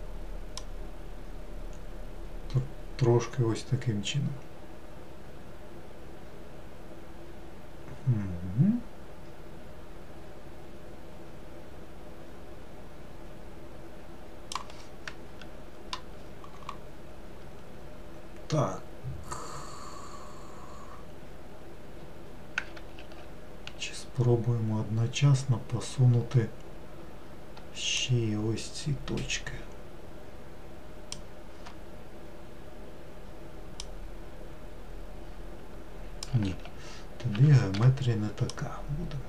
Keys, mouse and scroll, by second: 0.6 click, 23.0 ctrl+z, 28.0 shift+click, 33.8 click, 36.5 ctrl+z, 37.4 ctrl+z, 38.5 click.